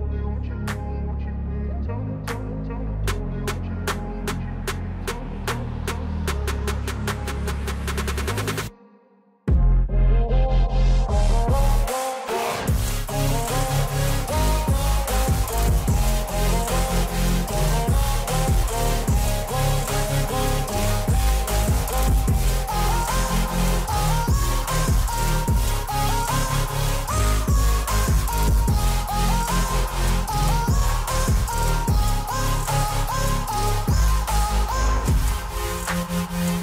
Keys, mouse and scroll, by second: 2.7 click, 7.0 alt+scroll up 1, 8.7-15.9 drag, 15.9 alt+scroll up 1, 19.5-20.7 drag, 20.7 space, 20.9-26.9 drag, 23.1 alt+Num_Lock, 27.7-29.5 drag, 29.5 space, 29.5-34.1 drag, 35.0-36.6 drag.